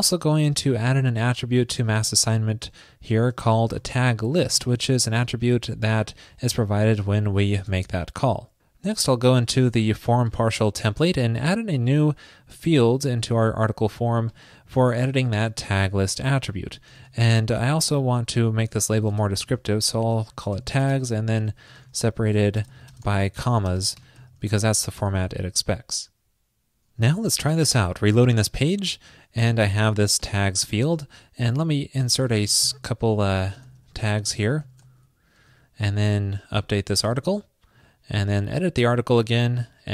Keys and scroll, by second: 7.0 alt+shift+Left, 7.6 alt+shift+Left, 7.8 super+s, 12.8 super+c, 13.4 super+v, 16.8 alt+shift+Left, 18.2 alt+Left, 25.3 super+s.